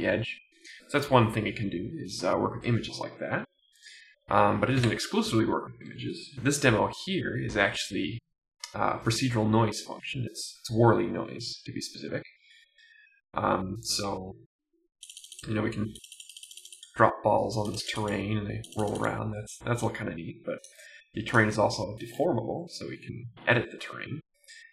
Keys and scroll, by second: 21.8 Down, 22.1 Right.